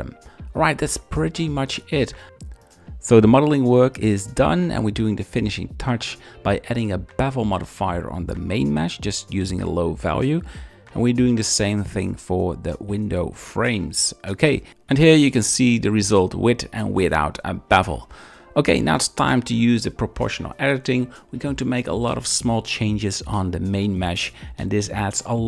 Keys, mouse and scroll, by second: 0.0-0.6 drag, 2.7 shift+middle click, 5.6 click, 7.5 click, 9.7 click, 11.9 shift+middle drag, 18.3 g, 18.5 g, 18.6 z, 19.6 click, 20.0-21.8 typing, 20.4 shift+click, 20.8 click, 21.2 shift+click, 21.3 shift+middle click, 21.7 click, 22.5 click, 22.8 shift+middle click, 23.0 g, 23.8 shift+g, 24.1 shift+click, 24.6 click, 25.3 z.